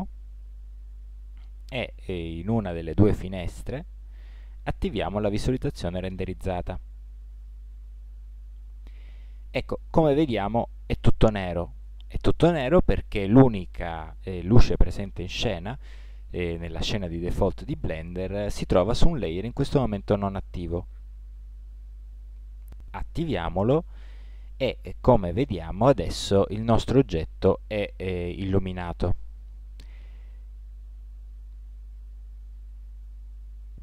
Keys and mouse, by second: 0.0 KP_1, 5.1 click, 21.8-23.7 drag, 32.3 click.